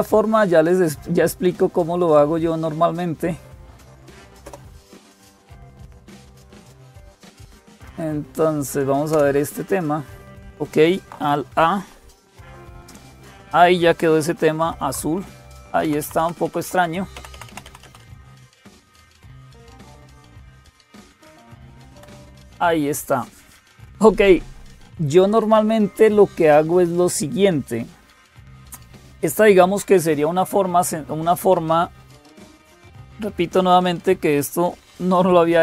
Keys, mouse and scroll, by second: 0.0-35.6 typing, 4.2 Return, 6.9 Down, 7.1 Down, 7.3 Down, 7.5 Down, 7.6 Down, 8.9 Return, 12.0 alt+a, 15.8 alt+super+d, 16.2 Down, 16.9 Down, 17.1 Up, 17.3 Up, 17.4 Up, 18.1 Down, 18.3 Down, 18.5 Down, 21.7 Escape, 30.2 click.